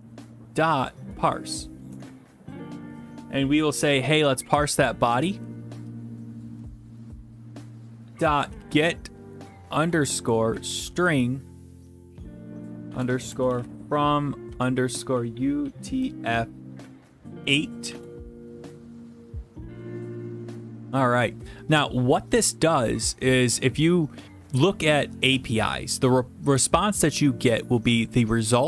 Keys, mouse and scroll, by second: 0.0-1.5 typing, 1.9 Tab, 4.3-6.6 typing, 8.4 typing, 9.8-10.9 typing, 12.9-16.0 typing, 17.4 8, 17.8 shift+9, 17.9 shift+0, 19.6 middle click, 20.7 click, 28.1 click, 28.2 click.